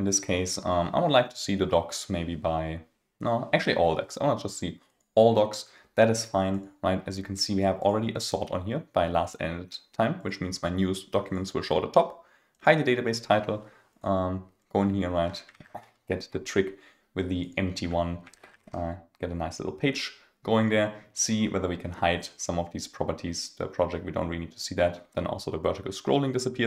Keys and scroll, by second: 16.0 super+a.